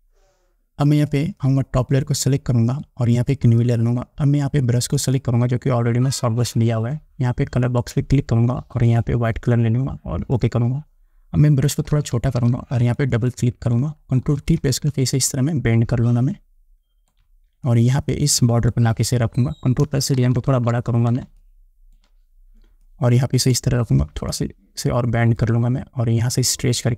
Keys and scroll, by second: 11.9 [, 14.5 ctrl+t, 20.4 ctrl+=, 21.5 space.